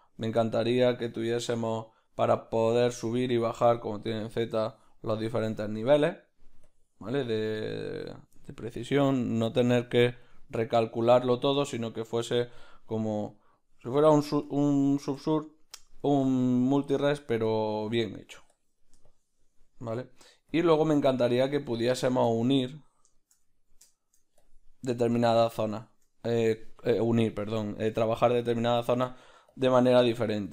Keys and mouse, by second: 0.2 ctrl+z, 0.2-2.0 middle drag, 0.8 click, 2.0-11.1 drag, 2.3 middle click, 5.9 middle click, 11.1-13.5 middle drag, 13.5-30.5 drag, 21.8 ctrl+middle click, 27.2-28.5 middle drag, 29.1 middle click, 30.1-30.5 ctrl+middle drag.